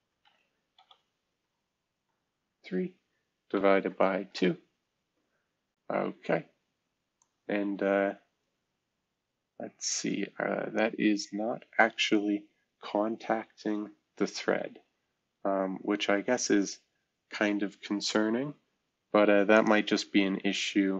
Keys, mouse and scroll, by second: 0.0-2.4 typing, 3.5 typing, 4.2 Return, 12.8-13.8 scroll down 2, 16.6-17.0 scroll up 2.